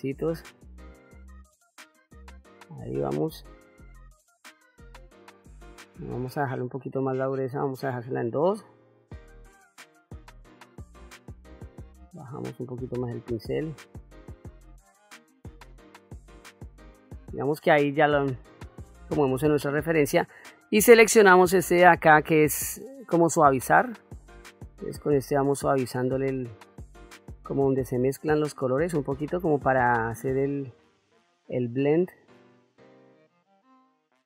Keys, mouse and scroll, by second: 0.3 click, 0.9 click, 1.7 click, 2.4 click, 3.1 click, 3.8 click, 4.4 middle click, 6.3-7.9 shift+f, 8.5 click, 9.0 click, 10.3 click, 11.1 click, 11.4 f, 12.6 click, 13.1 click, 13.5-15.0 drag, 15.6 click, 16.2 middle click, 17.7 middle click, 19.1 middle click, 22.4 click, 24.2-34.2 drag.